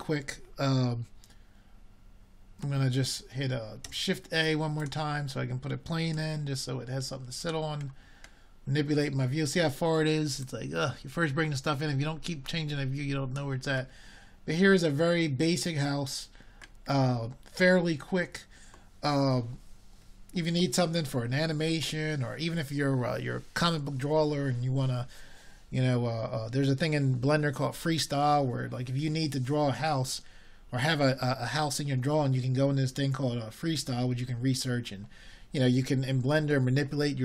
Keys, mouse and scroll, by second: 4.2-5.4 middle drag, 20.0 shift+a, 22.4 s.